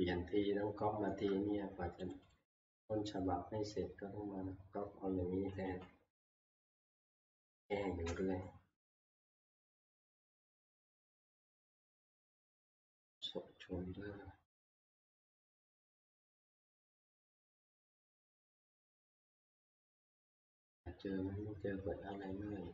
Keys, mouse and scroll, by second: 0.1 middle click, 0.5-0.8 shift+scroll, 1.2 shift+middle click, 3.3 shift+scroll, 6.2 click, 6.2 shift+scroll, 7.1 F11, 8.4-8.9 scroll, 9.5 scroll, 9.6 F11, 13.1 middle click, 20.3 click, 22.3 click.